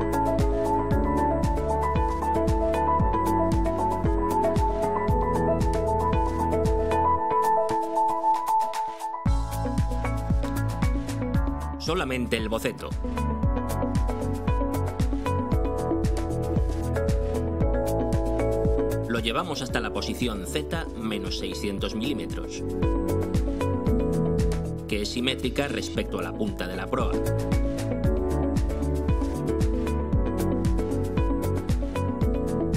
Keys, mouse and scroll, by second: 0.0 click, 7.4 click, 8.6 click, 10.0 click, 11.4 click, 13.6 click, 14.7 click, 16.1 click, 17.7 click, 19.8 click, 20.5 click, 22.3 BackSpace, 25.4 BackSpace, 26.0 -, 26.4 6, 29.2 Return, 30.4-32.3 drag.